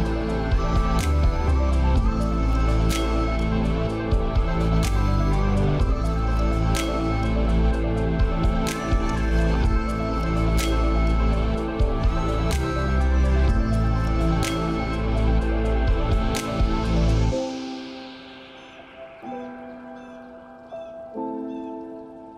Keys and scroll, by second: 0.4 ctrl+space, 6.6 ctrl+space.